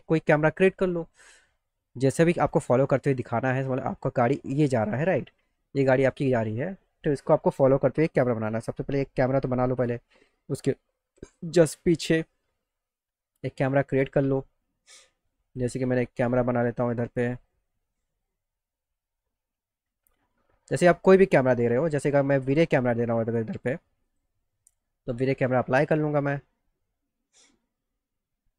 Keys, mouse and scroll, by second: 2.6 alt+middle click, 3.4 middle click, 4.4 click, 5.0 z, 10.2 middle click, 10.8 alt+middle click, 11.6 middle click, 12.3 middle click, 14.6 ctrl+alt+middle click, 16.7 middle click, 17.1 alt+middle click, 17.9-19.0 ctrl+alt+middle drag, 19.3 ctrl+alt+middle click, 20.3-21.9 middle drag, 22.2 middle click, 24.0 click, 27.3 click.